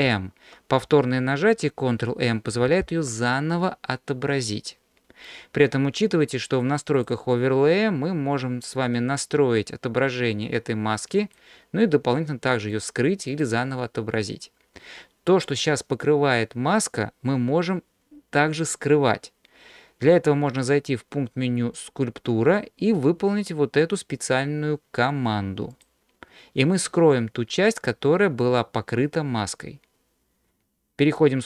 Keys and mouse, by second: 0.0 ctrl+m, 2.5 ctrl+m, 7.0-14.7 drag, 21.8-25.9 drag, 26.8-28.4 middle drag.